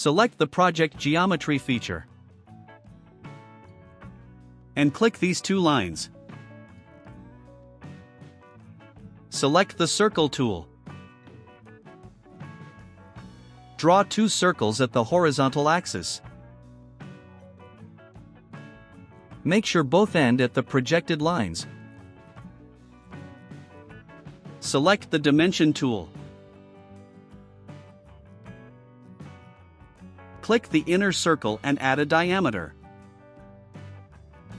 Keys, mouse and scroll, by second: 3.5 click, 5.3 click, 6.3 click, 7.6 right click, 12.2 click, 13.0 right click, 15.9 click, 17.6 click, 19.1 click, 21.5 click, 22.3 right click, 28.7 click, 32.0 click, 33.5 click.